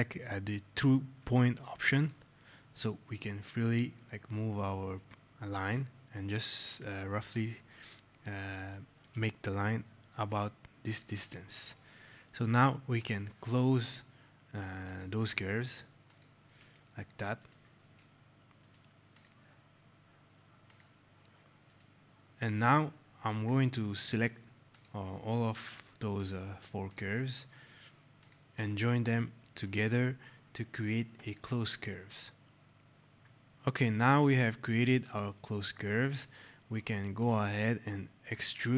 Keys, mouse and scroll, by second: 1.8 click, 10.8 click, 17.3 right click, 19.0 click, 21.6 right click, 22.2 scroll, 23.5 click, 26.1 shift+click, 28.7 click, 32.0 click, 32.6 scroll, 33.5 click, 34.8 click, 36.3 click.